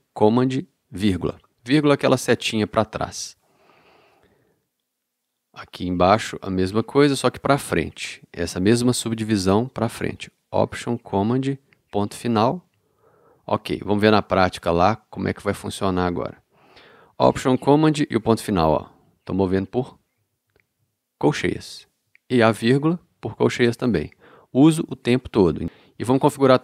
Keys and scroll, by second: 1.3 alt+super+,, 12.6 alt+super+., 18.5 alt+super+., 22.7 alt+super+,, 26.0 alt+k.